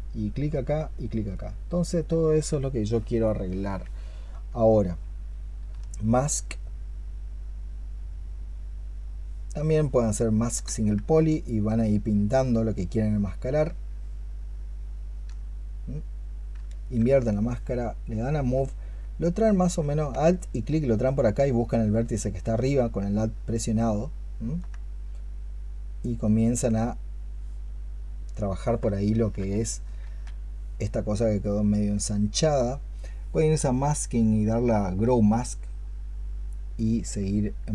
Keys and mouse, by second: 1.2 double click, 2.1 double click, 4.5 alt+click, 6.1-10.4 space, 11.2 alt+click, 13.6-19.7 alt+drag, 13.6-15.9 alt+middle drag, 16.7-19.7 middle drag, 20.3 alt+click, 22.4-24.2 alt+drag, 29.0 ctrl+z, 29.9 ctrl+z.